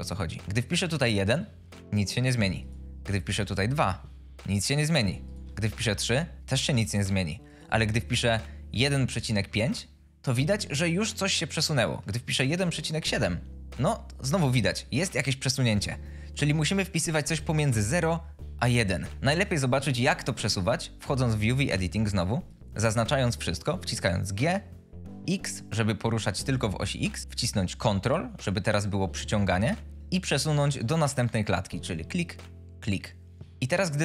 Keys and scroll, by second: 0.7 1, 0.9 Return, 3.0 2, 3.5 Return, 5.4 3, 5.8 Return, 8.7 1, 8.9 ., 9.3 5, 9.5 Return, 12.4 1, 12.6 ., 12.9 7, 13.1 Return, 24.6 g, 25.2 x.